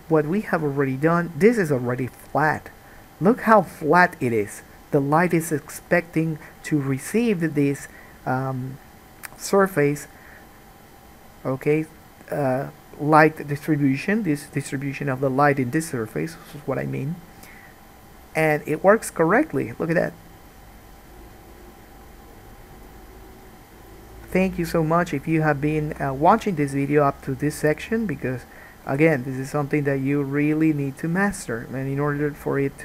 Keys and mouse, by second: 22.9 click, 23.0-28.1 middle drag, 28.1-29.1 drag, 29.1-32.3 middle drag, 29.1 g, 32.3-32.8 drag.